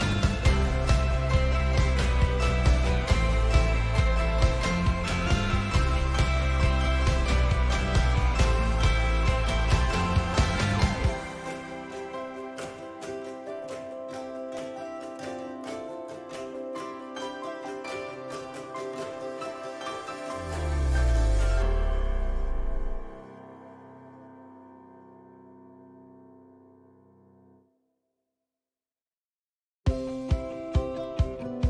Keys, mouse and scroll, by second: 5.1-5.5 right drag, 5.7 right click, 5.9 click, 5.9 g, 6.6 right click, 6.8 g, 8.2-8.9 drag, 9.0 right click, 9.7-10.4 right drag, 10.4-12.0 drag, 10.6-13.7 middle drag, 10.6-13.7 right drag, 13.3 click, 14.4 click, 14.4 right click, 15.8-17.0 drag, 15.8-16.5 right drag, 17.4 click, 18.8 click, 19.7 click, 20.3-22.9 right drag, 22.9 click, 23.1-23.8 right drag, 26.4 right click.